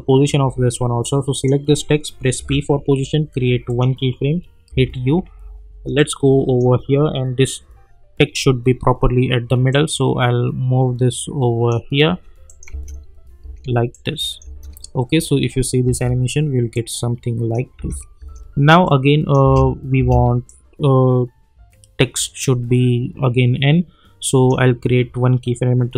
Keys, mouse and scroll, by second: 1.3 click, 2.4 p, 3.6 click, 4.7 u, 6.0-8.7 drag, 9.7-12.5 drag, 12.7 space, 13.9 click, 14.4 space, 16.7-17.6 click, 17.7 space, 18.8-19.4 click, 19.4 space, 20.5-24.5 drag.